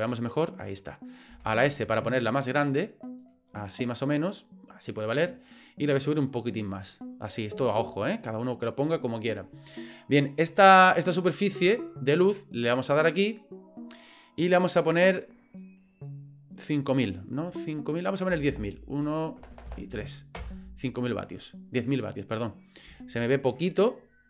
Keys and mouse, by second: 0.4 middle click, 1.3 s, 3.7-5.1 middle drag, 6.1-7.3 drag, 7.7-8.1 shift+middle drag, 13.4 click, 14.7-21.1 drag, 19.5 KP_0, 19.7 KP_0, 22.9-23.5 shift+middle drag, 23.7-24.2 middle drag.